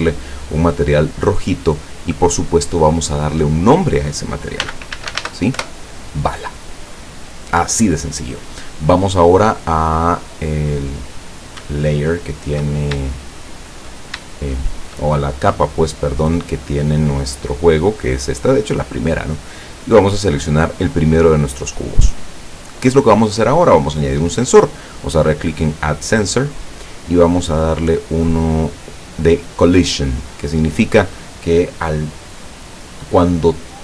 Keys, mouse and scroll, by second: 2.1 click, 4.7 b, 5.0 a, 5.1 l, 5.3 a, 5.6 Return, 10.1 click, 11.8-12.7 shift+middle drag, 13.1-13.8 shift+middle drag, 14.3-15.1 shift+middle drag, 19.9 right click, 22.5-23.0 drag, 26.1 click, 29.8 click.